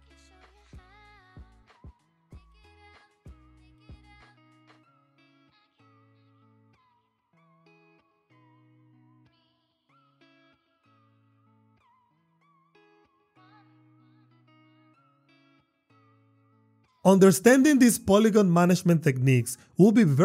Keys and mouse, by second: 0.6 Tab, 1.4 Tab, 2.6-4.7 typing, 3.5 click, 5.3 shift+click, 5.5 shift+click, 5.9 f, 6.2 click, 7.2 shift+click, 7.3 shift+click, 9.6 g, 11.7 y, 12.6 Tab, 13.2 f, 13.9 Tab, 14.4 e, 14.8 y, 15.1 ctrl+click, 15.3 Tab, 15.8 f, 15.9 click, 16.1 click, 16.2 Tab, 17.2 shift+click, 19.3 e.